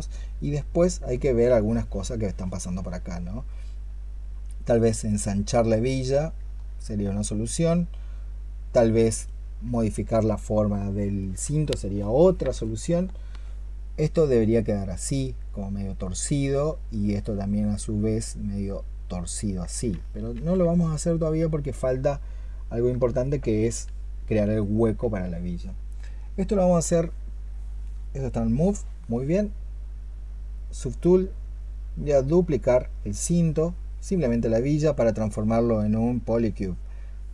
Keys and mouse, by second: 11.0 alt+click, 19.7 ctrl+z, 20.2 ctrl+z, 22.7 ctrl+z, 26.7 alt+click, 33.3 alt+click.